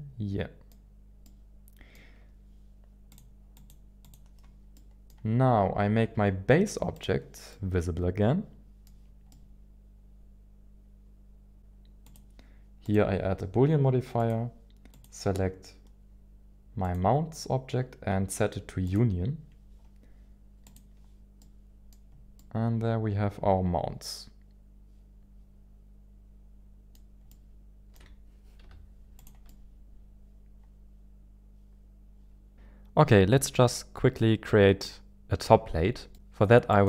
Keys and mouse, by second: 1.2-3.1 middle drag, 3.1 click, 3.5 click, 4.1 click, 4.7-5.1 middle drag, 6.9 click, 7.6-9.1 middle drag, 9.3-11.6 middle drag, 14.9-17.2 drag, 18.9-19.4 drag, 20.6 click, 21.4 middle click, 22.3-27.1 middle drag, 28.1 middle click, 28.6 z, 29.4 z, 30.2-32.5 middle drag, 36.1 middle click, 36.7 click.